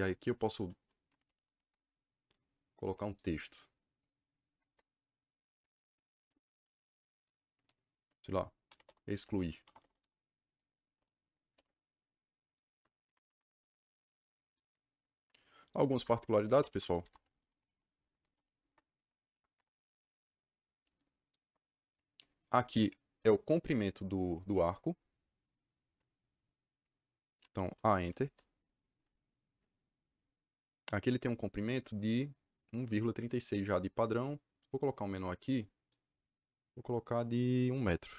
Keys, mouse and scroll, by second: 0.7-1.8 typing, 3.0 click, 3.9 click, 4.6 KP_Enter, 8.3-11.2 typing, 12.4 click, 13.0 Escape, 13.1 Escape, 15.7 Escape, 15.9 Escape, 16.1-18.2 typing, 18.9 Down, 19.2 Up, 19.5 Return, 27.9 a, 28.1 KP_Enter.